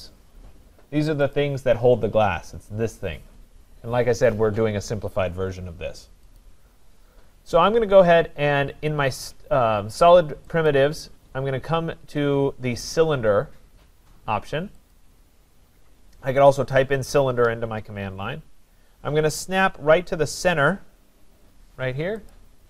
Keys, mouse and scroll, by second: 1.6 click, 6.4 click, 10.7 click, 15.0 click, 19.0 scroll up 3, 19.2-19.6 scroll, 22.3 click.